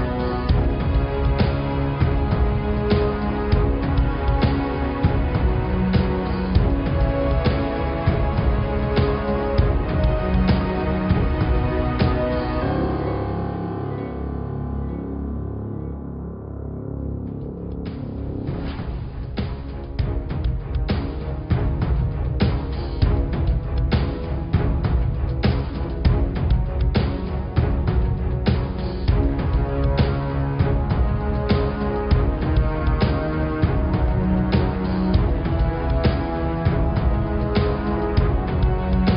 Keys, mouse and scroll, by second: 0.3 ctrl+r, 2.3 click, 4.4 ctrl+g, 5.9 g, 8.4-9.9 middle drag, 9.9 click, 11.0 g, 13.5 click, 13.8-17.5 middle drag, 17.7-18.9 middle drag, 18.9 click, 19.2 scroll down 5, 19.5 scroll up 4, 19.7 Tab, 20.1-22.4 middle drag, 24.5-26.7 middle drag, 27.7 Tab, 28.0-28.3 scroll up 2, 28.3-30.1 middle drag, 30.1-30.5 scroll up 1, 30.5 middle click, 30.9-32.2 scroll down 1, 32.2 click, 36.4 click, 37.4 click, 37.9 shift+a.